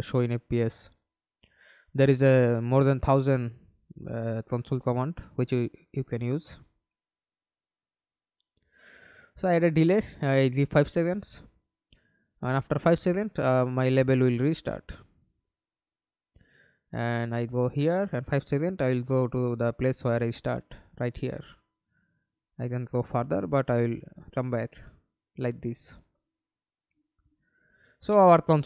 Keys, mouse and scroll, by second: 3.2 d, 3.9 double click, 9.5 Delete, 9.5 5, 10.4 Return, 12.9 Return, 13.4 middle click, 14.3 F11, 14.9 alt+p, 16.5-17.6 w, 17.6 space, 19.7 d, 22.0-24.5 w, 26.3-27.0 w, 28.2 w.